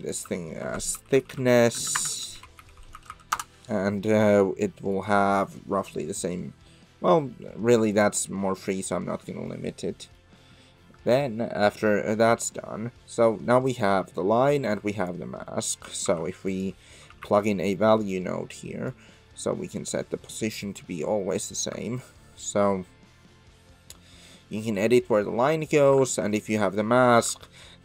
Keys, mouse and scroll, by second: 1.9 BackSpace, 3.1 s, 4.9-8.0 drag, 9.5 middle click, 12.2 Tab, 12.7 middle click, 14.0 middle click, 14.8 click, 15.6 click, 16.0 shift+a, 19.0-19.7 drag, 20.8 click, 22.2-25.6 shift+drag, 26.3 ctrl+shift+click.